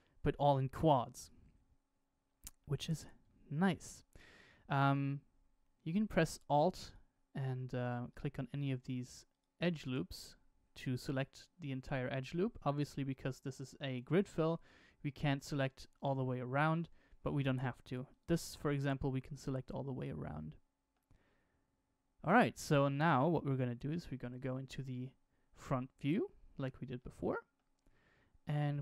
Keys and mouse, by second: 2.5 middle click, 3.6 alt+click, 6.8 alt+click, 8.0 alt+click, 9.2 alt+click, 9.8 alt+click, 10.7 alt+click, 18.1 alt+click, 19.1-20.9 middle drag, 24.1 KP_1, 26.9 shift+middle click, 28.4 shift+middle click.